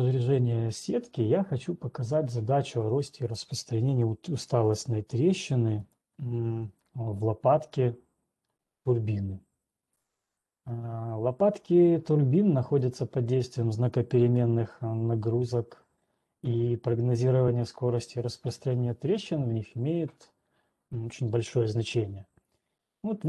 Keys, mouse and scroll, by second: 4.5-5.1 scroll, 5.1 alt+Tab, 6.7 alt+click, 8.0-9.1 scroll, 12.0-13.0 middle drag, 14.5-23.0 middle drag, 17.0-19.5 scroll.